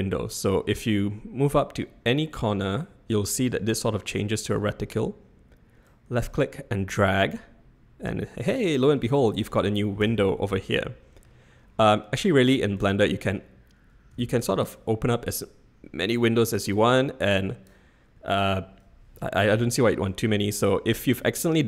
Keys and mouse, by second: 5.8-8.8 drag, 10.0 n, 10.7-11.2 middle drag, 12.7-14.4 drag, 15.2 click, 16.8 click.